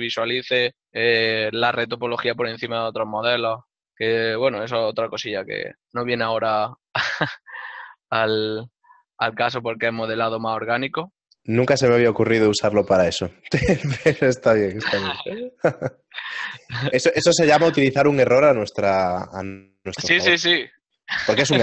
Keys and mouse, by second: 3.6 middle click, 5.7 click, 8.0 right click, 8.9 y, 10.5 right click, 11.0 ctrl+middle click, 12.8 click, 13.2 Tab, 13.4 click, 14.1 right click, 14.6 ctrl+middle click, 17.2 e, 17.4 ctrl+middle click, 19.0-19.8 typing.